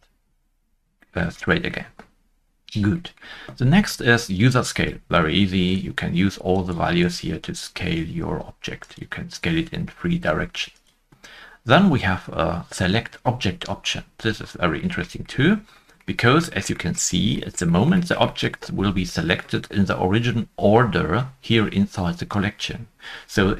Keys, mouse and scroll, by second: 0.5 Return, 0.5 scroll down 1, 1.5 scroll down 1, 1.5 middle click, 6.5 Return, 6.5 middle click, 6.5 click, 6.5 scroll down 1, 6.5 0, 14.3 Return, 14.3 middle click, 14.3 click, 14.3 scroll down 1, 15.3 scroll up 1, 15.3 middle click, 15.9 middle click, 16.0 shift+middle click, 17.0 scroll up 1, 17.7 scroll up 2, 17.9 middle click, 18.2 middle click.